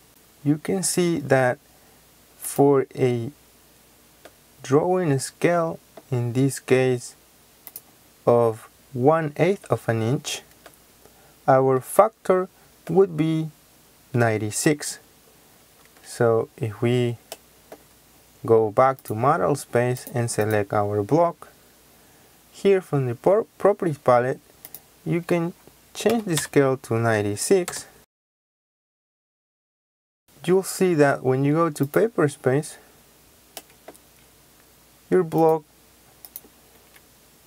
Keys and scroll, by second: 15.7 Escape, 26.0 KP_9, 26.3 KP_6, 27.6 Return, 28.8 Escape, 36.6 Escape.